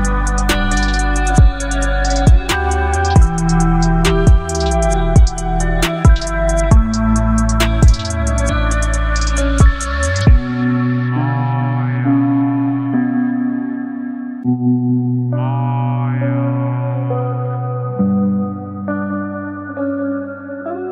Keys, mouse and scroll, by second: 6.7 click, 8.1 right click, 9.9 click, 15.4-20.9 drag.